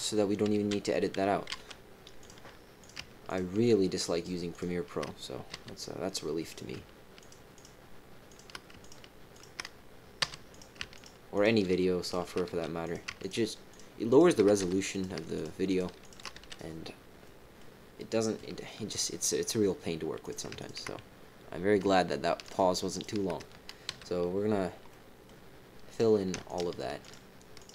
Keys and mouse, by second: 1.5 x, 2.8 click, 3.2 shift+click, 4.5 shift+click, 5.5 f, 6.4 click, 7.1 shift+click, 7.5 shift+click, 8.2 shift+click, 8.8 shift+click, 9.3 shift+click, 10.2 f, 10.5 click, 10.9 shift+click, 11.3 shift+click, 12.0 shift+click, 12.5 f, 12.8 click, 13.2 shift+click, 14.0 shift+click, 14.6 f, 14.9 click, 15.3 shift+click, 15.6 shift+click, 16.0 shift+click, 16.3 f, 17.2 middle click, 17.9 click, 20.2 click, 20.5 shift+click, 22.4 shift+click, 22.9 shift+click, 23.9 f, 24.9 middle click, 25.9 click, 26.4 shift+click, 27.0 shift+click.